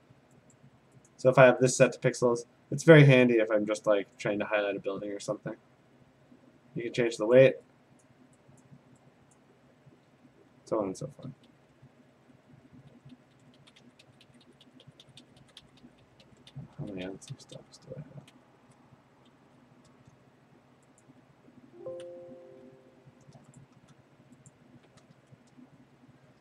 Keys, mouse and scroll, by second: 0.6 click, 1.1 click, 4.2 shift+click, 7.4 click, 8.1 click, 8.6 click, 9.4 click, 11.0 ctrl+z, 11.3 ctrl+z, 11.6 ctrl+z, 11.9 ctrl+z, 12.1 ctrl+z, 12.3 ctrl+z, 12.5 ctrl+z, 12.7 ctrl+z, 12.9 ctrl+z, 13.4 ctrl+z, 13.6 ctrl+z, 13.8 ctrl+z, 14.0 ctrl+z, 14.2 ctrl+z, 14.4 ctrl+z, 14.6 ctrl+z, 14.8 ctrl+z, 15.2 ctrl+z, 15.4 ctrl+z, 15.6 ctrl+z, 16.0 ctrl+z, 16.2 ctrl+z, 16.5 ctrl+z, 16.8 ctrl+z, 17.0 ctrl+z, 17.3 ctrl+z, 17.6 ctrl+z, 18.3 ctrl+z, 19.5 ctrl+s, 21.1 shift+click, 22.4 `, 22.6 Escape, 23.6 shift+click, 24.5 click, 25.2 `, 25.4 Return.